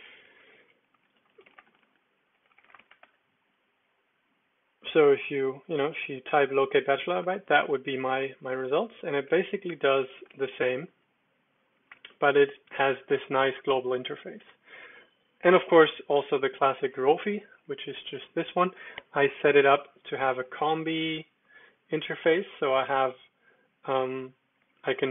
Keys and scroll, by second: 0.2-3.4 typing, 8.4 alt+space, 8.7-10.9 typing, 14.5 Escape, 15.4 super+d, 21.4 j, 22.5 ctrl+j, 23.2 ctrl+j, 23.2-24.0 ctrl+j, 24.0 ctrl+k, 24.6 ctrl+k, 24.8 ctrl+j, 25.0 ctrl+j.